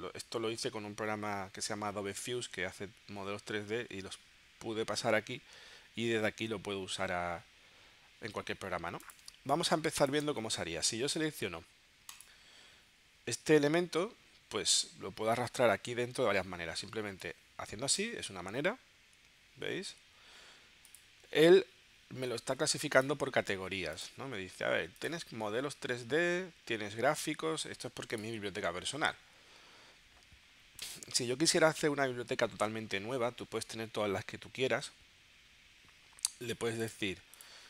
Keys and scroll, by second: 9.3 space.